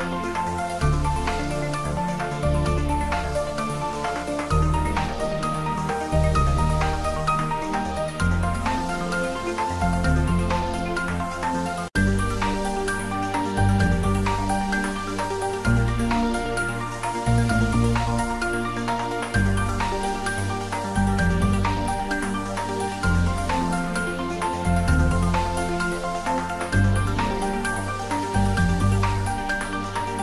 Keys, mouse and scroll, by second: 1.2 click, 3.4 click, 3.4 click, 4.8 click, 8.5 click, 9.8 click, 12.8 click, 13.3-13.8 scroll down 1, 14.2 middle click, 15.3-16.2 scroll up 1, 16.3 click, 17.5 click, 19.5-20.2 scroll down 1, 20.2 middle click, 21.0 click, 21.3-21.7 scroll down 1, 23.4-24.6 middle drag, 24.6 click, 27.1-27.9 scroll up 1, 27.9-30.2 drag.